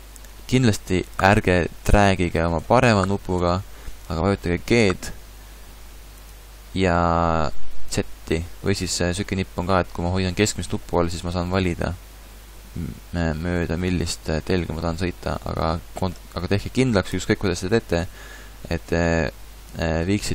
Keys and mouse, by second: 4.8 g.